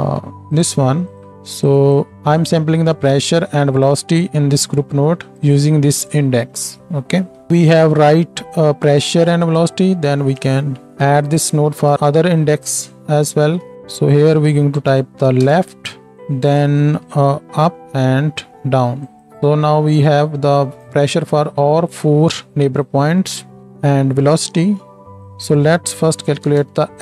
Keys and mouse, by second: 1.1-6.2 drag, 1.3-7.2 middle drag, 1.3-26.3 right drag, 7.2 Tab, 10.1 ctrl+shift+d, 11.9 ctrl+shift+d, 13.4 ctrl+shift+d, 13.7-23.6 drag, 13.7-23.6 middle drag, 23.6 g, 25.2-26.3 drag, 26.3 d.